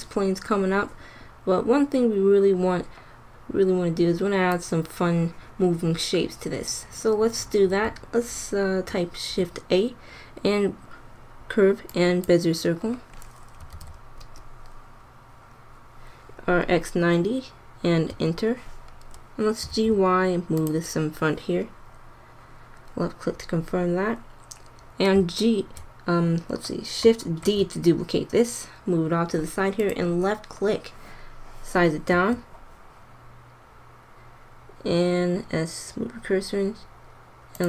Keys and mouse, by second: 8.9 shift+a, 13.6 r, 19.6 g, 22.1 click, 27.4 shift+d, 32.0 s.